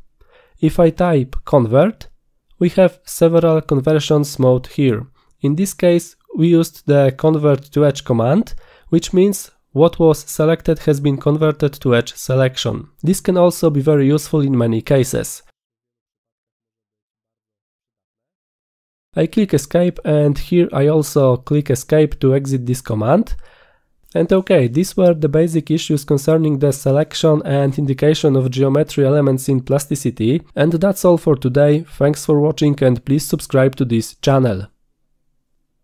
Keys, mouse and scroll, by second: 1.8-4.3 typing, 19.0 Escape, 21.6 Escape.